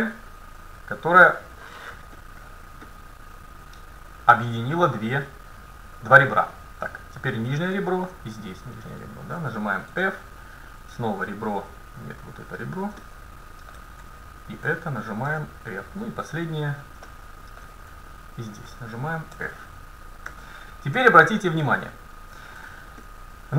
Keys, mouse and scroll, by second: 2.5 middle click, 5.3-7.2 middle drag, 8.9-14.1 right drag, 10.0 f, 13.0 middle click, 13.6 click, 14.1 middle click, 14.3 click, 14.3-18.1 right drag, 15.3 f, 17.1-18.9 middle drag, 18.3-20.3 right drag, 19.4 f, 20.3 a, 21.0 KP_7, 21.7 middle click, 23.1 middle click.